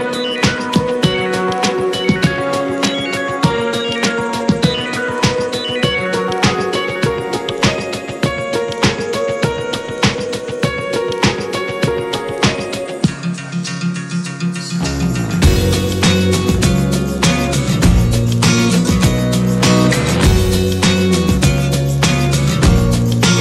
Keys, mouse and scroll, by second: 0.4-3.2 middle drag, 3.2 Tab, 3.4 click, 3.6 scroll down 4, 3.8 click, 4.2-5.1 shift+middle drag, 5.1 click, 6.2-6.5 middle drag, 6.5 click, 6.8 shift+middle drag, 7.0 scroll up 1, 7.3-8.6 middle drag, 8.6-11.2 drag, 11.8-15.6 drag, 17.0-19.4 drag, 19.4 scroll down 1, 19.5 middle click, 19.6-20.5 scroll up 3, 20.0 shift+middle drag, 20.5 `, 20.9-21.6 middle drag, 21.6-21.9 scroll up 1, 21.9-23.4 middle drag.